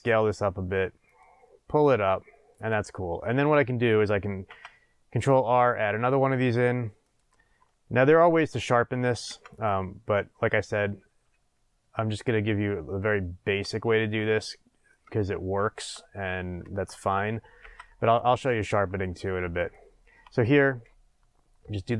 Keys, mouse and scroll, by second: 1.9-3.5 drag, 3.2 scroll down 1, 4.4 ctrl+r, 6.3 click, 9.2 ctrl+r, 13.6 click, 14.1-15.7 middle drag, 17.6 ctrl+r, 19.7 click, 20.6 s.